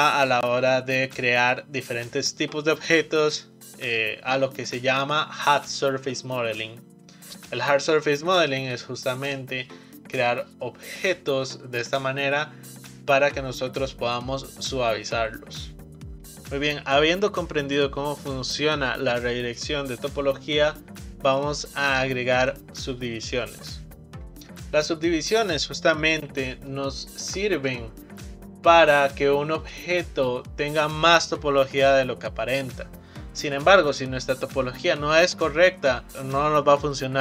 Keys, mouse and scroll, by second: 26.8-27.6 shift+middle drag, 27.6 click, 29.6 click, 36.1-37.2 middle drag.